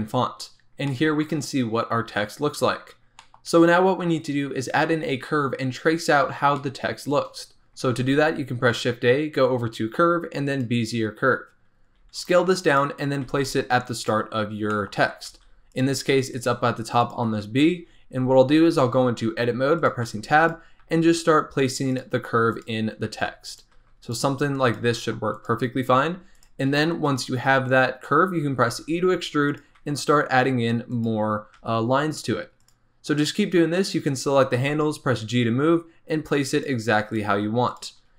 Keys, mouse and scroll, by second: 0.5 scroll down 1, 0.8-6.2 shift+middle drag, 6.5-7.8 shift+middle drag, 7.8 shift+a, 11.6-12.0 scroll down 2, 12.0 s, 12.9 scroll up 2, 13.2 g, 14.3 scroll up 4, 14.7 shift+middle click, 14.9 shift+scroll up 2, 15.2 g, 16.0 s, 16.4 g, 17.3 Tab, 17.5-18.4 scroll down 3, 18.5 scroll up 3, 19.7 click, 20.0 g, 20.8 r, 22.5 click, 23.0 r, 23.7 g, 24.3 s, 24.8 g, 25.8 scroll up 1, 26.0 r, 26.8-28.7 shift+middle drag, 28.7 e, 29.8 r, 31.5 g, 33.2 click, 34.5 g, 37.1 click, 37.7 click.